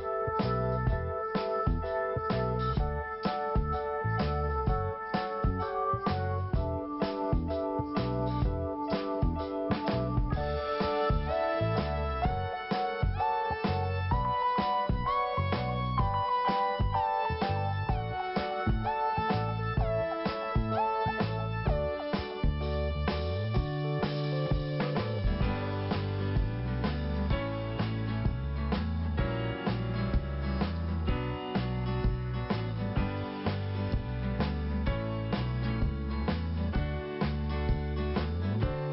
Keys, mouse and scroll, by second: 0.4 click, 0.5 click, 0.9 click, 1.0 double click, 6.4 click, 6.5 click, 6.6 click, 6.7 double click, 7.5 Delete, 9.0 click, 9.1 click, 9.2 click, 9.3 double click, 18.1 click, 20.6 click, 23.6 click, 31.1-31.4 scroll down 1, 31.7 scroll up 1, 36.6-37.3 scroll down 1, 37.9 click.